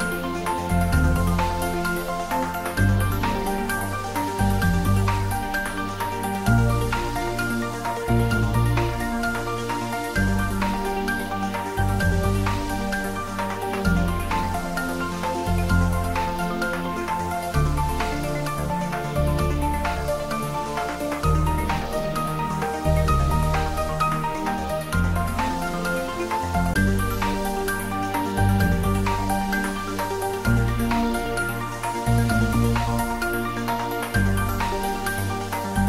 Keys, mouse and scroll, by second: 7.2 scroll down 1, 8.9 click, 10.8 Tab, 11.2-12.5 scroll down 1, 17.1 s, 18.2 typing, 18.8 click, 19.5 scroll down 1, 20.1-20.7 middle click, 20.9-22.5 scroll up 1, 22.5-23.1 middle click, 23.4 scroll up 1, 25.3 click, 26.5 Tab, 27.1 scroll up 1, 27.8 click, 28.8 click, 29.6 shift+click, 31.3-31.6 scroll up 1, 32.6 click, 34.2 alt+shift+click.